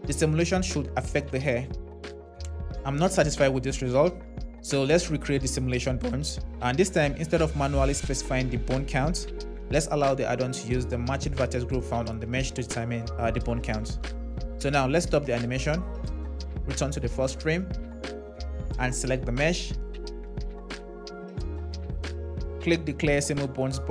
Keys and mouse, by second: 15.4 space, 18.9 click, 22.7 click.